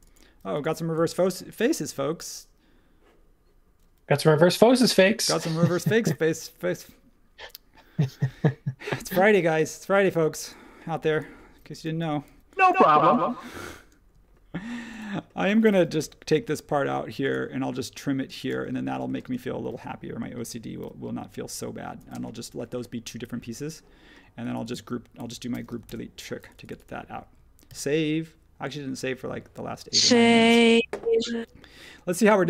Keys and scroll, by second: 10.1 e, 11.6 space, 12.3 e, 13.0 space, 14.1 space, 16.0 l, 18.5 space, 19.2 space, 20.8 p, 22.0-23.5 typing, 25.1 super+g, 25.8 BackSpace, 27.6 super+s.